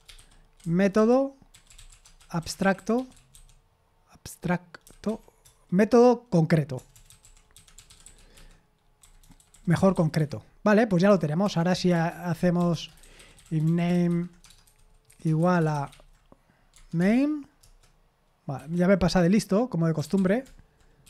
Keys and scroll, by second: 2.5-3.8 typing, 7.8 typing, 9.5-10.7 typing.